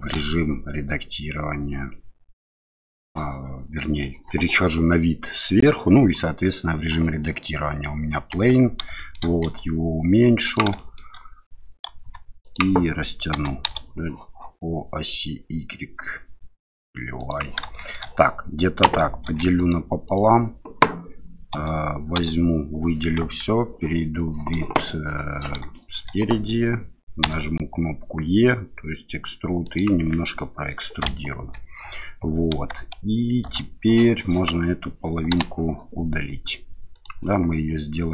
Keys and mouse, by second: 8.3 Tab, 8.9 shift+click, 9.4 s, 10.4 click, 10.7 shift+click, 12.0 s, 12.4 click, 13.3 s, 13.6 y, 17.1 click, 17.7 shift+middle click, 19.2 ctrl+r, 20.0 click, 21.5 a, 22.1 a, 23.2 KP_1, 25.7 shift+click, 27.2 e, 29.6 click, 31.3 KP_7, 31.4 KP_7, 33.4 shift+z, 34.3 click, 35.3 Delete.